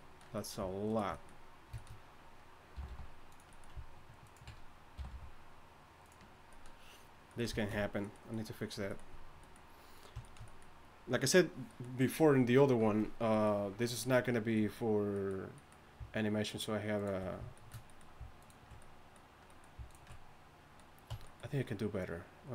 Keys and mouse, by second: 2.7 g, 4.2 click, 5.0 g, 10.6-13.3 drag, 17.6-21.1 middle drag, 21.1 Tab.